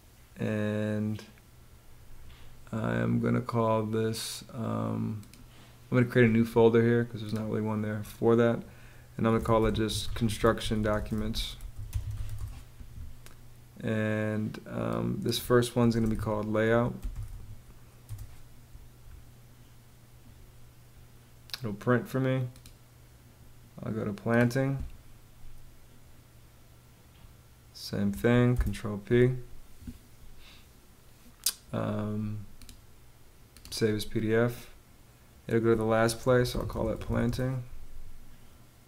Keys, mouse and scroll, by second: 8.7-12.2 typing, 15.2-17.2 typing, 17.5 Return, 28.0 super+p, 35.5-37.1 typing.